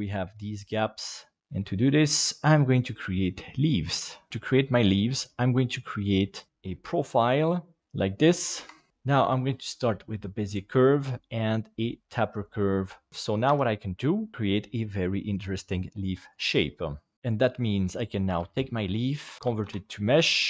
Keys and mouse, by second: 0.9 middle click, 1.5 middle click, 4.9-6.5 drag, 6.5 Tab, 6.6 shift+middle click, 8.6 F2, 11.1-12.4 drag, 13.4 Tab, 18.3 shift+d, 19.6 alt+x, 19.6 alt+c.